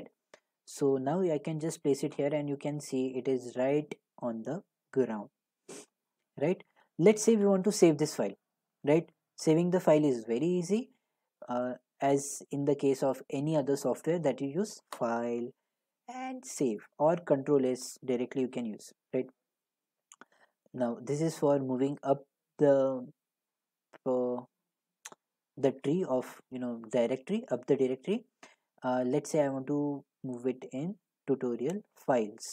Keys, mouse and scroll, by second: 1.8-4.6 drag, 6.0 click, 7.2 middle click, 8.3 middle click, 10.9 scroll, 15.1 click, 16.5 click, 20.5 click, 31.5 click, 31.6 click, 32.1 click.